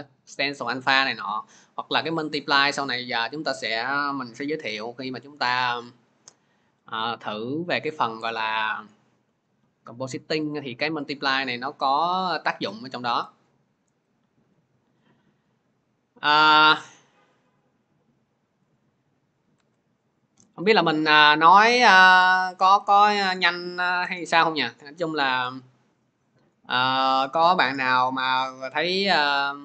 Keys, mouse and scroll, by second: 11.8 click, 12.5 click, 13.6 click, 14.0 click, 14.9-15.6 scroll, 15.9-16.2 scroll, 18.6 click, 18.6-19.0 scroll, 19.4 alt+Tab, 20.4 alt+Tab, 21.1 alt+Tab, 21.5 alt+Tab, 22.3 alt+Tab, 23.1 alt+Tab, 23.9 alt+Tab.